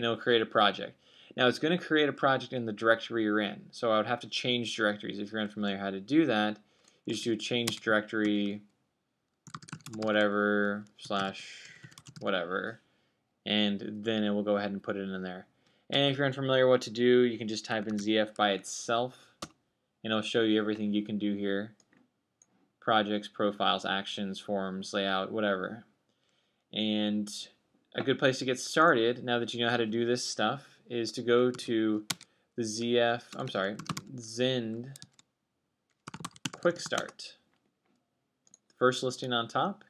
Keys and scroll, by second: 0.0-0.8 typing, 5.3-6.8 BackSpace, 7.9-22.7 typing, 32.2-33.2 typing, 34.4-38.4 typing.